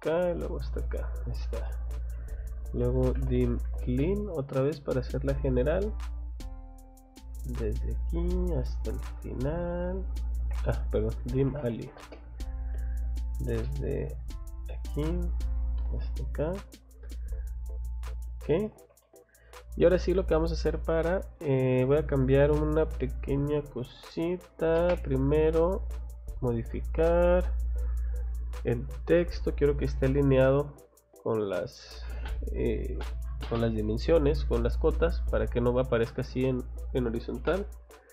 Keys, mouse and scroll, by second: 0.5 click, 0.8 Escape, 1.1 scroll down 2, 1.7 middle click, 2.6-4.1 typing, 7.5 click, 8.4 scroll up 2, 9.3 click, 9.5 scroll down 2, 10.4 Escape, 11.0-11.9 typing, 13.5 middle click, 14.6 click, 14.9 scroll down 2, 15.6 scroll up 1, 16.3 click, 16.5 scroll down 1, 18.4 click, 18.6 Escape, 19.0 middle click, 20.7 click, 20.9 click, 24.6 d, 24.8 space, 26.4 click, 28.4 click, 29.4 click, 31.1 click, 38.0 click.